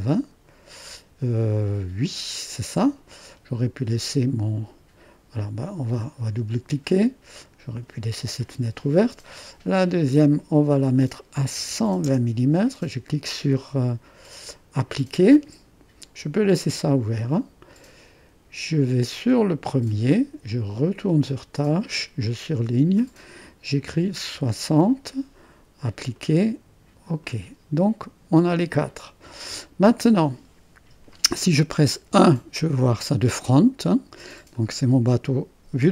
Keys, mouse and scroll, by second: 5.6-6.7 drag, 7.4-8.8 drag, 10.3-11.7 drag, 11.4-12.6 typing, 12.6-14.3 scroll up 1, 14.3-17.4 drag, 17.7 click, 19.5-20.5 drag, 21.2-23.9 drag, 23.9 6, 24.4 0, 26.2-28.1 drag, 32.1 1, 34.6-35.9 drag.